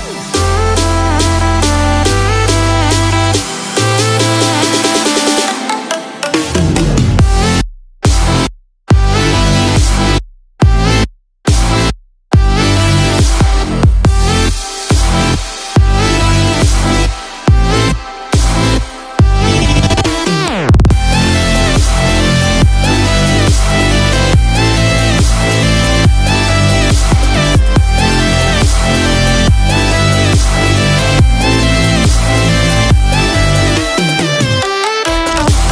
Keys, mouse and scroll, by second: 4.3-12.2 click, 12.2-12.7 scroll down 1, 12.7 click, 13.2 shift+click, 15.0 click, 17.3 shift+d, 23.6 scroll down 1, 24.8-25.1 scroll down 2, 25.1 scroll up 1, 28.0 click, 34.8-35.2 scroll up 1.